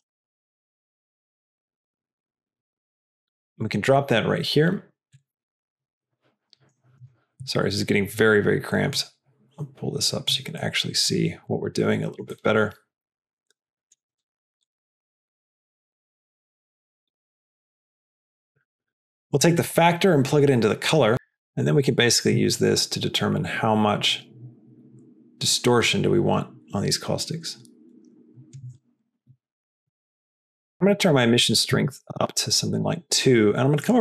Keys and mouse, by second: 9.1-10.5 drag, 10.7 click, 11.0 middle click, 12.4-14.1 shift+middle drag, 14.8-15.8 drag, 16.4 click, 17.4 middle click, 17.8 click, 18.6-19.3 middle drag, 20.3 click, 21.9-28.9 drag, 30.7-33.0 drag.